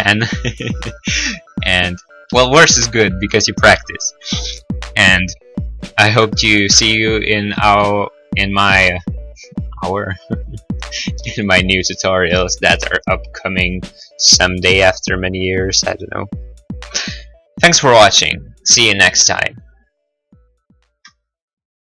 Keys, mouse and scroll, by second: 0.8 right click, 0.8-2.0 typing, 3.5 click, 6.6 middle click, 7.2 middle click, 7.3 middle click, 7.3-7.7 scroll, 11.6 ctrl+s, 11.6 click.